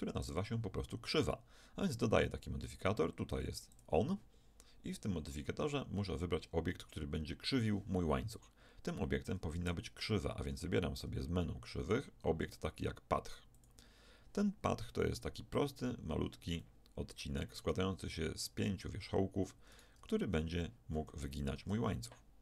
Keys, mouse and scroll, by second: 0.3-4.1 drag, 9.9 shift+a, 16.6-18.5 middle drag, 17.6 Tab, 19.7-21.5 drag, 20.0 g, 21.6 Tab, 22.1 middle click.